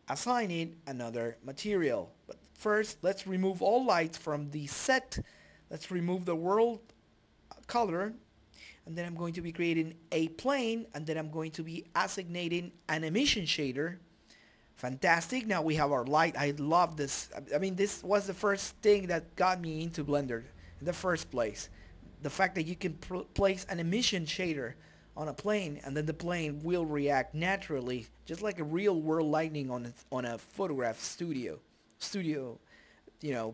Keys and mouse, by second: 0.4 middle click, 0.7 right click, 2.1-3.6 drag, 4.2 right click, 4.6 shift+a, 5.5 click, 6.1 KP_Decimal, 6.5-8.1 drag, 7.1 Delete, 7.4 shift+a, 9.1 click, 10.0 right click, 10.6 s, 11.9 g, 12.6-14.2 middle drag, 14.2 click, 14.2 right click, 15.2 right click, 15.8 middle click, 16.3 g, 16.4 right click, 17.4 ctrl+space, 19.8 shift+z, 20.2 click, 21.0 middle click, 21.7 s, 22.1 s, 22.8 right click, 23.5 shift+d, 24.9 click, 25.5 g, 25.9 right click, 26.5 click, 26.9 shift+d, 27.5 click, 28.5 g, 28.8 right click, 29.4 click, 30.1 s, 30.5 g, 31.0 right click, 32.2 middle click, 32.5 space, 33.0 click.